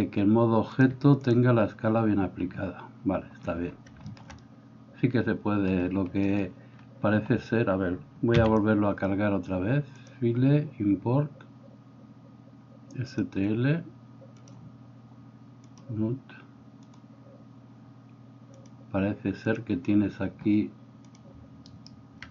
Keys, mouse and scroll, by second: 0.9-22.3 drag, 8.4 x, 21.7 alt+middle click, 21.7 alt+right click.